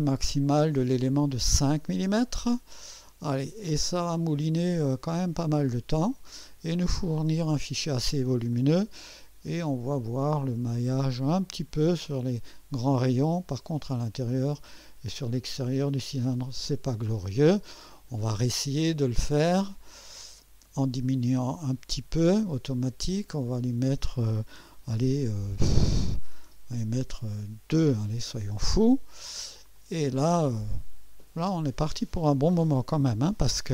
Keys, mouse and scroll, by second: 4.1 click, 8.5-15.6 drag, 16.2-17.1 drag, 17.9 click, 19.7 click, 21.0 click, 23.5 click, 27.7 2, 29.8 click.